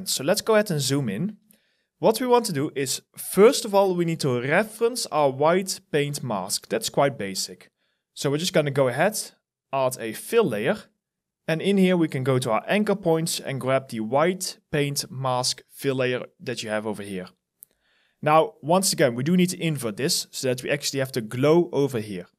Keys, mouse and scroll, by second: 0.0 alt+click, 0.8 alt+middle click, 1.0 alt+right click, 21.9 alt+middle click.